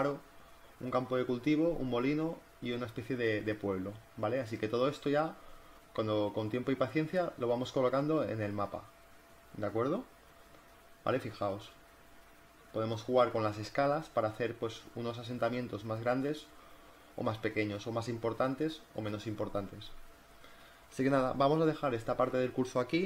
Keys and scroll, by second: 0.4 z, 3.4 v, 7.1 z, 8.7 space, 10.9 space, 12.8 space, 17.7 space, 21.5 z, 22.8 space.